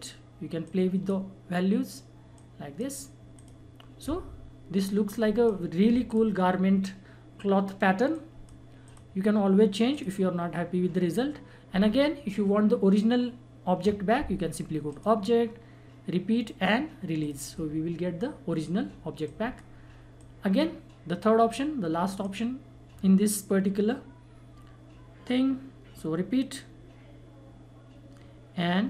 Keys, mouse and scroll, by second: 17.1 click, 17.2-22.1 drag.